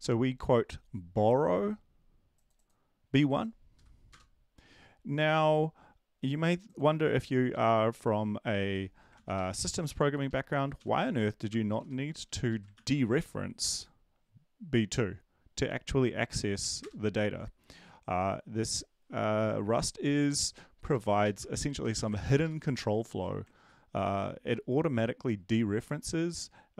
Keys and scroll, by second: 3.7 Up, 9.1 ctrl+x, 9.3 Right, 10.1 Left, 10.2 Left, 10.7 ,, 11.0 space, 11.7 *, 11.9 ctrl+v, 12.5 Right, 12.7 ctrl+s, 16.3 ctrl+l, 16.6 Up, 16.8 Return, 20.8 BackSpace, 21.2 ctrl+shift+Right, 21.5 ctrl+x, 21.8 BackSpace, 21.9 BackSpace, 22.2 ctrl+Left, 22.4 ctrl+Left.